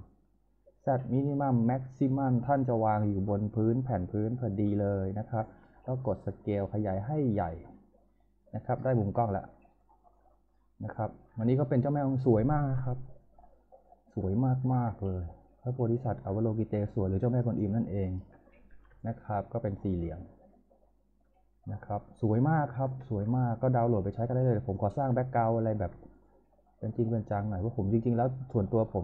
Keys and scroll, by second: 5.2-6.2 typing, 7.5 w, 9.3 z, 11.2 z, 18.7 shift+f, 24.7 f, 28.7 e.